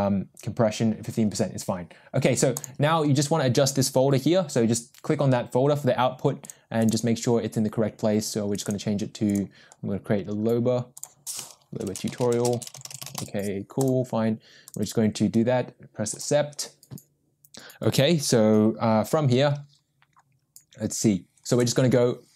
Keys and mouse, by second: 2.5 click.